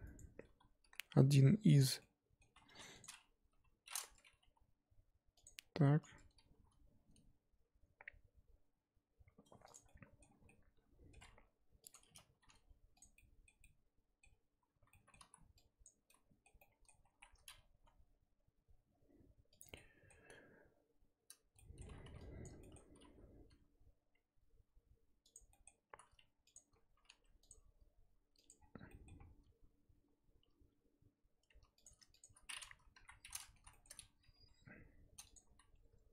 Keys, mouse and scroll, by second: 0.2 Tab, 0.4 a, 0.8 e, 2.0 middle click, 2.7 2, 3.0 click, 3.4 KP_1, 4.4 g, 6.1 a, 6.5 g, 9.8 middle click, 10.4 scroll down 1, 10.4-11.9 middle drag, 11.9 click, 12.3 g, 13.1-15.2 middle drag, 15.2 z, 15.8 click, 16.1 z, 16.6 middle click, 17.0 s, 19.7-22.0 middle drag, 22.0 3, 22.4 click, 22.6 shift+middle click, 23.5 i, 25.5-26.5 middle drag, 26.5 alt+click, 26.7-27.1 scroll up 2, 27.5 alt+e, 28.6 scroll down 2, 28.9 middle click, 29.1-30.4 scroll up 1, 30.4 2, 30.6-31.3 scroll up 2, 31.5 3, 31.8 click, 32.2 shift+click, 32.9 KP_1, 33.6 z, 33.7 shift+middle click, 33.9-34.3 scroll up 1, 34.3 g, 35.6 z.